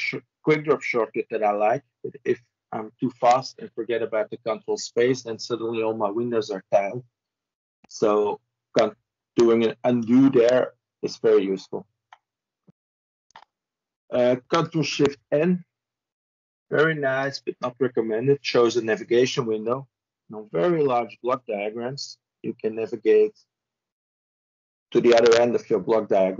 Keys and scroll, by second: 14.6 ctrl+shift+n.